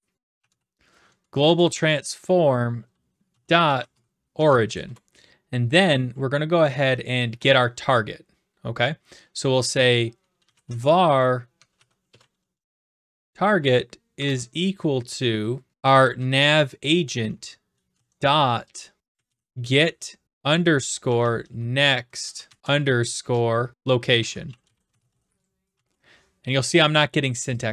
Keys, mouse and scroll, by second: 0.0-1.0 typing, 1.2 Down, 1.4 Down, 3.3-4.4 typing, 4.8 Return, 10.2-14.2 typing, 15.5-16.5 typing, 17.2 Tab, 18.9-22.7 typing, 23.9-25.7 typing, 27.6 click.